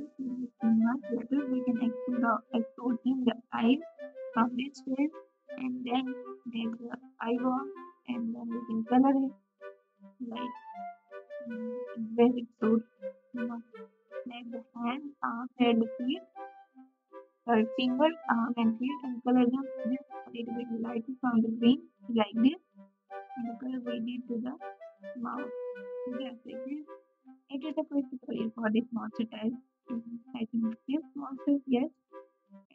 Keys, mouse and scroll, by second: 8.0 Tab.